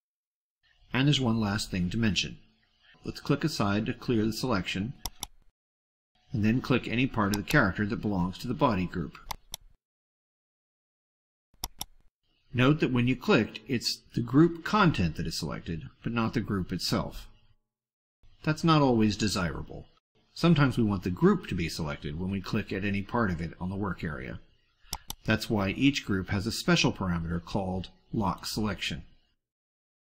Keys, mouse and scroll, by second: 4.8 click, 7.2 click, 9.1 click, 11.6 click, 24.7 click, 28.3-30.1 drag.